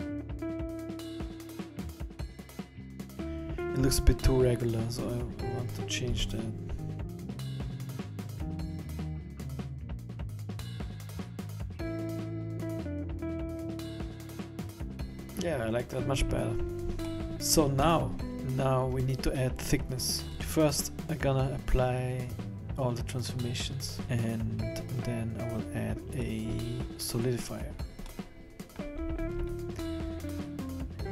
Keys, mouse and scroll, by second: 0.0-3.1 typing, 0.0 middle click, 0.8-1.5 scroll down 10, 1.7 scroll up 3, 1.8 scroll down 1, 6.1 s, 8.1 a, 8.2 a, 8.2 b, 8.8 b, 9.9 b, 10.9 s, 11.8 middle click, 12.2 scroll up 4, 12.3 scroll down 5, 12.4 middle click, 12.7 middle click, 12.9 middle click, 13.1 middle click, 13.5 scroll up 6, 13.7 Tab, 13.9 Tab, 14.0 middle click, 14.2 middle click, 14.3 Tab, 14.5 middle click, 16.3-16.7 scroll up 3, 16.7-17.1 scroll down 6, 17.1 middle click, 17.1 scroll up 1, 17.2 scroll down 1, 17.3-18.0 scroll down 4, 18.0 middle click, 18.3 Tab, 18.3-18.8 scroll down 10, 18.8 scroll down 1, 20.3 click, 26.2 click, 28.3 middle click, 29.2-30.0 scroll up 10.